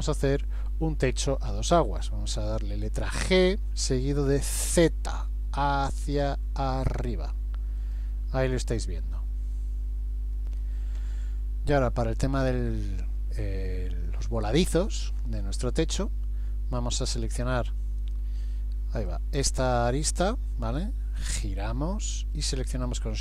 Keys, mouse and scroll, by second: 3.4 g, 18.0 right click, 19.8 click, 21.2 middle click.